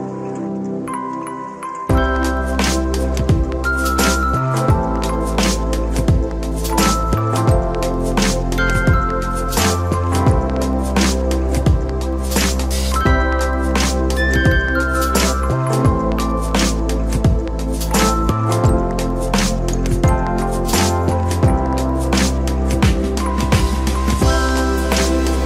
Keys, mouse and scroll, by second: 0.3 click, 0.5 click, 0.8-1.1 right drag, 1.2 click, 1.4 right click, 1.7-13.5 typing, 2.2 right click, 2.5-3.0 drag, 3.3-3.7 middle drag, 3.7 click, 4.5 right click, 4.7 right click, 4.8 click, 5.1-5.4 shift+middle drag, 5.6 click, 5.9 right click, 6.1 click, 6.6 click, 7.0-7.3 middle drag, 7.5 click, 8.1 click, 8.4 middle click, 9.6 click, 10.0 right click, 10.2 click, 11.4 click, 11.6 click, 12.2 right drag, 12.9 click, 13.6 middle click, 13.6 scroll down 3, 13.8 middle click, 14.3 click, 14.4 middle drag, 14.6 g, 14.8 shift+middle click, 14.9 scroll up 1, 15.0 g, 15.3 a, 15.5 click, 15.6 r, 16.6-24.4 typing, 16.7 right click, 17.9 click, 18.0 drag, 18.8-19.2 drag, 19.6-19.9 drag, 20.1 click, 20.4 click, 21.6 click, 22.3 right click, 22.5 click, 23.1 click, 24.3 click, 25.3 ctrl+s.